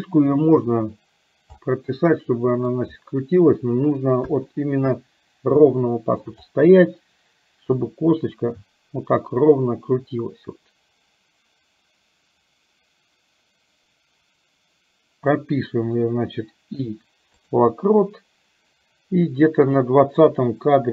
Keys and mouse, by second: 1.7-2.8 middle drag, 4.4 KP_1, 5.8 shift+middle click, 7.8 click, 8.2-15.5 drag, 19.9 click.